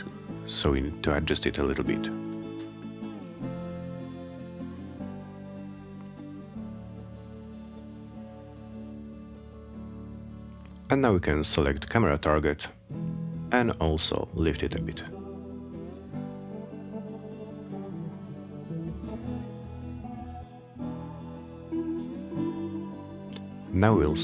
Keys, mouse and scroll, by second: 7.0 click, 8.2 click, 11.0 click, 13.3-17.8 drag, 20.1 click, 22.1 click.